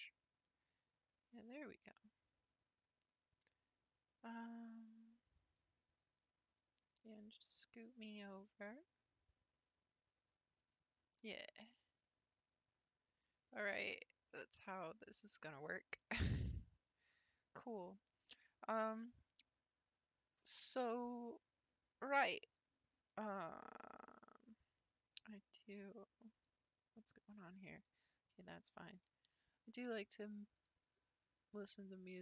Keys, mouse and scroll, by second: 10.6-13.7 drag.